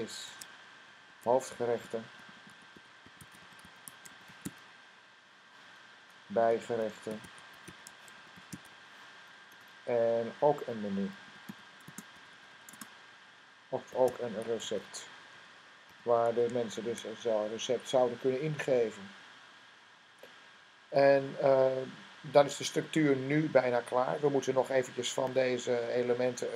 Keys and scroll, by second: 0.1 Tab, 0.9 Tab, 1.4-4.9 typing, 6.1-9.0 typing, 10.8-16.6 typing.